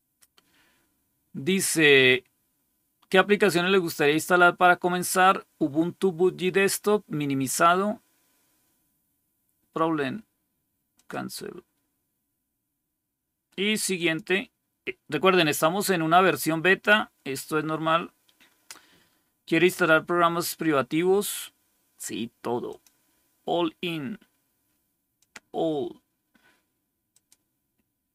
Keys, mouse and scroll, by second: 10.8 click, 13.8 click, 22.6 click, 25.0 click, 27.0 click.